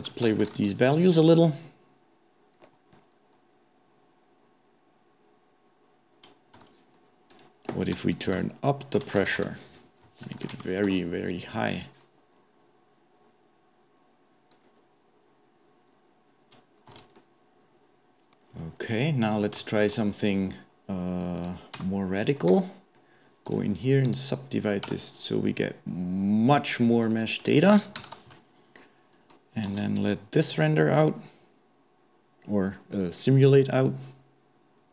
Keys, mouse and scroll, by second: 0.5 shift+Left, 6.7 space, 7.3-10.3 drag, 10.5 shift+Left, 10.9 space, 15.2-16.5 scroll down 4, 16.5 scroll up 1, 17.1 space, 17.2-18.5 middle drag, 18.5-18.8 scroll down 1, 18.8-19.6 scroll up 2, 19.6-21.8 shift+middle drag, 21.8 Tab, 23.5-26.6 right drag, 26.6 Tab, 27.1-28.4 middle drag, 28.4 shift+Left, 29.7 space.